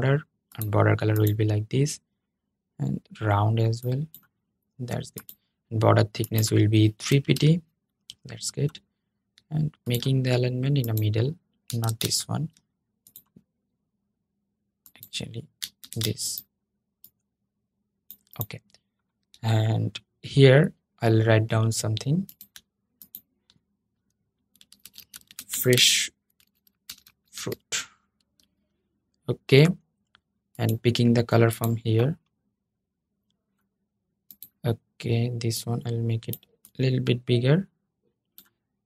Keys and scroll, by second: 11.5 super+z, 15.5 super+z, 27.9 super+a.